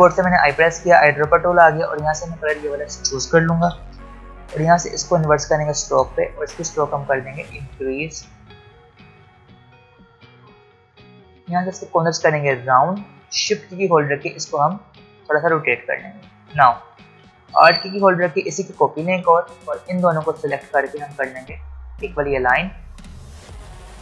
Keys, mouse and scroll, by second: 2.4 click, 3.6 v, 4.9 click, 7.4-8.6 scroll up 1, 8.8 alt+scroll up 1, 10.0 alt+scroll up 1, 11.3-17.8 drag, 17.8-24.0 alt+drag.